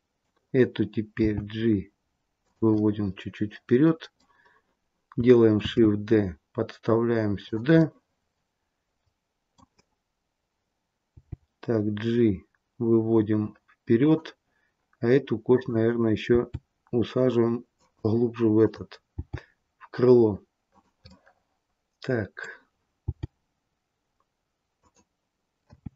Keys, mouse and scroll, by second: 1.1 g, 2.7 middle click, 5.6 shift+d, 7.7 middle click, 11.0 g, 15.4 click, 16.2 g, 18.5 click, 19.1 g, 21.0 middle click, 23.0 g, 25.6 r.